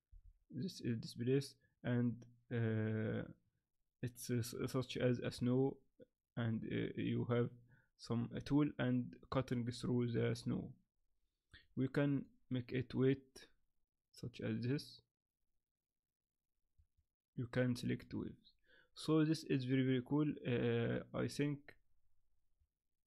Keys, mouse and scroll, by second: 11.5 click, 16.8 click.